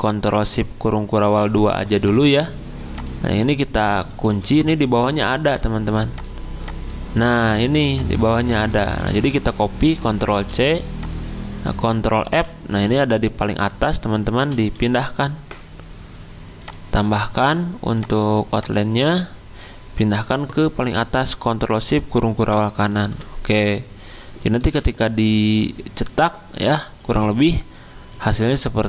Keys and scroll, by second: 1.1 ctrl+alt+2, 4.3 ctrl+2, 5.3 ctrl+z, 8.5 ctrl+z, 8.9 ctrl+z, 10.3 ctrl+z, 10.3 ctrl+c, 12.2 ctrl+f, 14.8 x, 22.5 ctrl+shift+], 24.6 f.